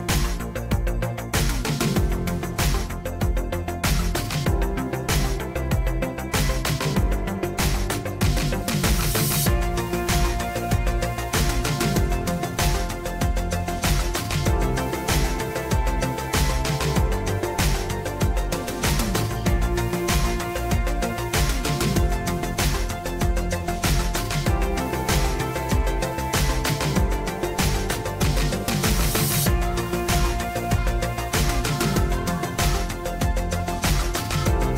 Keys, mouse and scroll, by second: 6.6-9.1 typing, 11.7-13.2 typing, 13.6 Return, 15.3 typing, 17.4-18.6 drag, 20.4-22.1 drag, 28.7-30.4 drag.